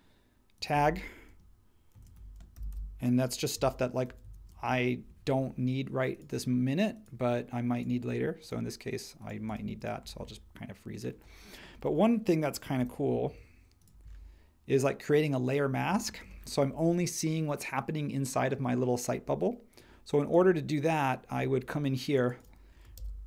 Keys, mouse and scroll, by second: 1.6-4.2 typing, 4.5 Return, 6.5 typing, 12.7 r, 16.2 space, 22.9 super+c.